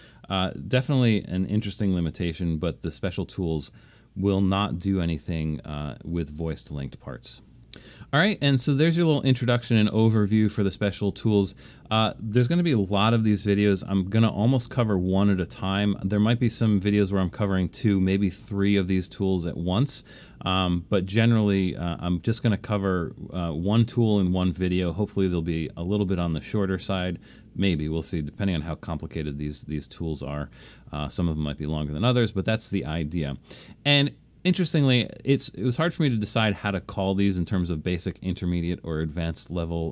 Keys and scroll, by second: 0.4 alt+super+/, 3.0 BackSpace.